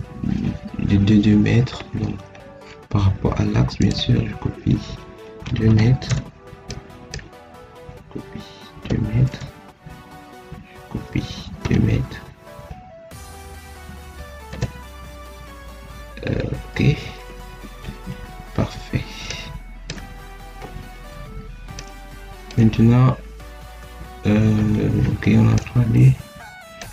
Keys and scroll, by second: 5.6 2, 6.0 Return, 8.7 2, 9.2 Return, 11.5 2, 14.4 Return, 17.2 Escape.